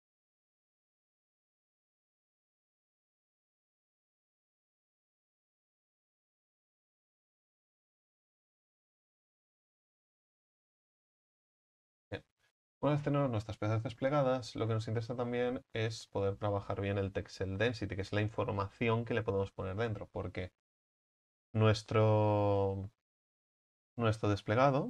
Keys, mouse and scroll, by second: 0.0 right click, 1.1 s, 2.0-3.5 right drag, 3.5 s, 4.6-6.6 right drag, 6.6 s, 8.8-9.5 drag, 9.5 right click, 11.5 w, 11.9-13.7 scroll down 4, 13.7 Tab, 14.0 scroll down 5, 15.4-16.6 middle drag, 16.6-20.5 scroll down 6, 20.5 Tab, 23.7 a, 23.9 a.